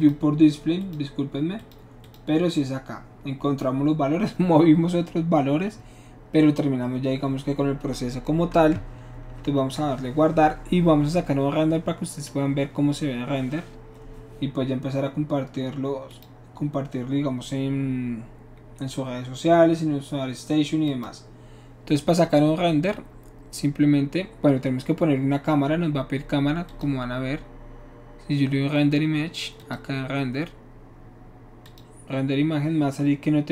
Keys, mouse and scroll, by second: 0.0 click, 0.8 click, 1.6 click, 2.0 click, 9.4 ctrl+s, 16.1 click, 20.8 click, 26.7 click, 29.6 click, 31.6 click.